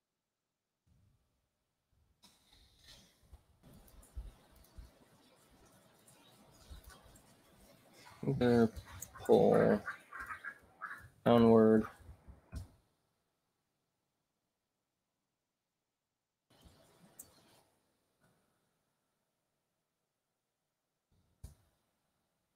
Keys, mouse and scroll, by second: 0.6 right click, 2.5 click, 3.1 click, 3.8 click, 4.6 click, 6.0 click, 7.9-12.8 typing, 14.3 right click, 15.1 click, 18.6 BackSpace, 20.2-22.5 typing.